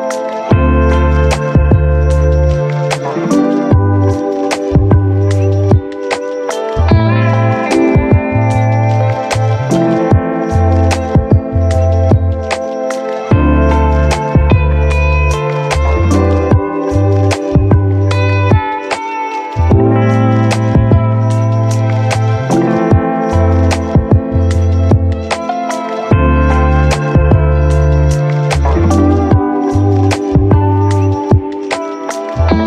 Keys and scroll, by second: 0.7 ctrl+1, 13.9 ctrl+z, 15.0 0, 15.1 Return, 22.8 ctrl+Delete, 25.3 ctrl+1.